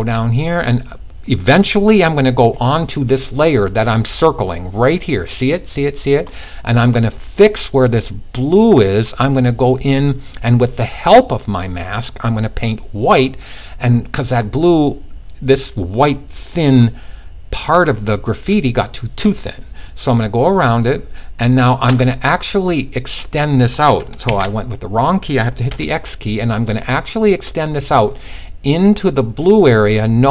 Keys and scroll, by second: 23.9 super+z, 25.2 super+x.